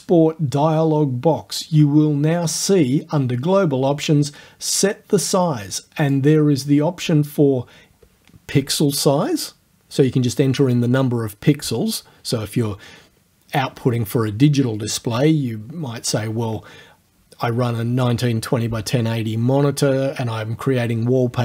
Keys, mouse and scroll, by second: 6.0 click.